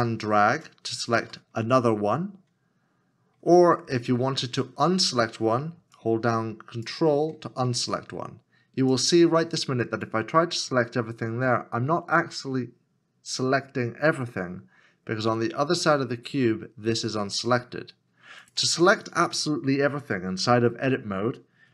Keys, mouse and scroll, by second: 6.0 ctrl+l, 6.0 ctrl+click, 14.2 middle click.